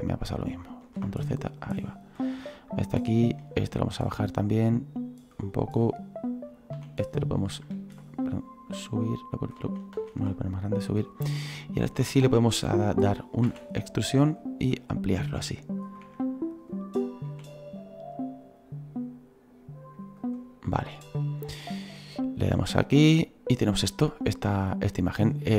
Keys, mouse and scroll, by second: 0.2 click, 0.8 ctrl+z, 1.6-2.7 drag, 2.7-3.7 right drag, 3.7-5.7 drag, 5.7 right click, 6.7 s, 8.7 click, 9.6 ctrl+z, 9.9 ctrl+z, 10.5-11.5 drag, 11.5-13.4 right drag, 13.4 e, 14.6 s, 16.0 e, 17.3 s, 22.6-25.5 drag.